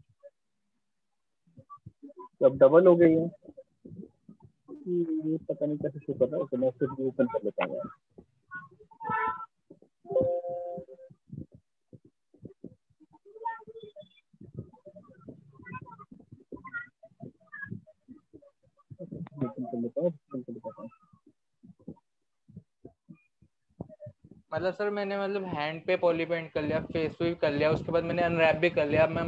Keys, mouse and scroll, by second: 0.8 click, 4.8 right click, 5.6 alt+click, 8.5 click, 9.3 click, 11.5 click, 19.5 click, 21.7 click, 21.9 click, 23.0 click.